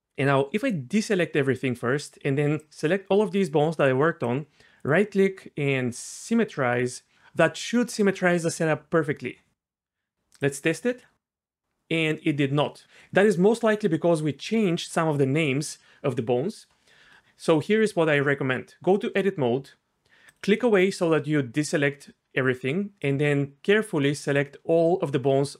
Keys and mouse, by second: 0.9 click, 5.0-6.5 right drag, 7.1 middle click, 7.7 Tab, 10.9 g, 18.1 Tab.